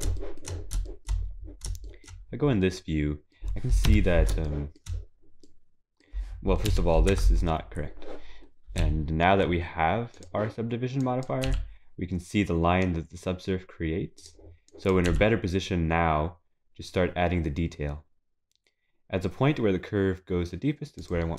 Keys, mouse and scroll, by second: 0.2 shift+middle click, 0.8 shift+middle click, 1.1 scroll up 1, 1.9 shift+middle click, 1.9 scroll up 2, 2.7 middle click, 2.7 scroll up 6, 3.9 KP_3, 4.5 shift+middle click, 5.2-5.5 scroll down 2, 5.6 middle click, 6.7 KP_3, 7.1 Tab, 8.8 z, 11.4 click.